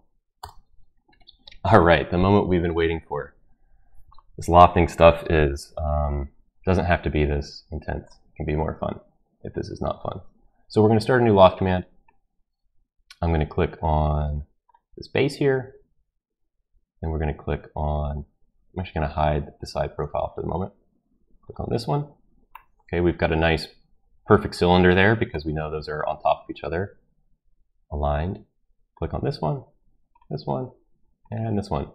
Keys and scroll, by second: 0.4 Return.